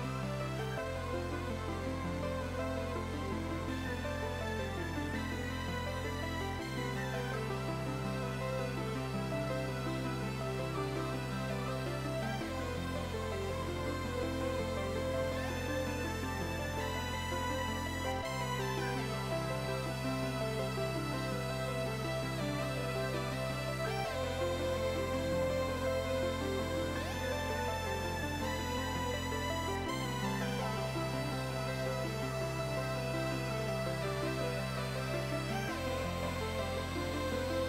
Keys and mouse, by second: 0.1 x, 0.3 click, 2.0 click, 2.0 right click, 2.3 click, 2.8 s, 3.3 click, 3.9 Delete, 4.0 click, 4.4 click, 5.8 click, 8.0 ctrl+o, 8.1 click, 8.9 click, 10.1 click, 10.6 Right, 10.8 Left, 12.2 click, 12.8 ctrl+e, 12.9 click, 13.6 ctrl+1, 13.7 click, 13.8 Delete, 14.2 click, 14.4 x, 14.5 click, 14.8 Up, 16.1 click, 16.3 alt+y, 16.7 ctrl+shift+x, 16.8 click, 18.1 shift+click, 19.0 click, 19.2 Up, 19.4 click, 20.9 click, 21.6 ctrl+1, 23.3 click, 24.9 a, 25.1 click, 25.8 Escape, 25.9 1, 26.1 click, 26.4 ctrl+x, 26.5 click, 27.9 a, 28.3 ctrl+z, 28.9 a, 28.9 click, 30.4 ctrl+1, 31.0 click, 31.7 s, 31.8 ctrl+click, 32.6 ctrl+click, 33.1 ctrl+e, 35.0 click, 36.3-37.6 typing, 36.9 Return, 37.5 click.